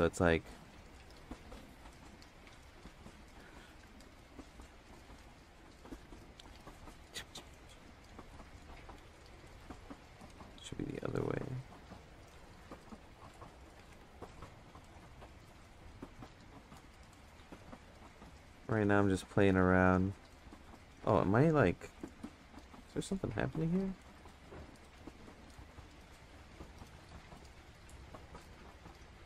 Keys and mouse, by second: 0.2 shift+click, 3.1 ctrl+z, 3.3 ctrl+z, 3.8 ctrl+z, 4.3-5.8 drag, 6.0 ctrl+z, 6.3-8.3 drag, 10.3 ctrl+z, 10.9-12.9 drag, 13.8 ctrl+z, 14.8-17.5 drag, 18.6 ctrl+z, 20.0 ctrl+z, 20.3-21.4 drag, 22.3 ctrl+z, 22.5 click, 24.9 ctrl+z, 25.5 click, 27.8 ctrl+z, 29.1 click.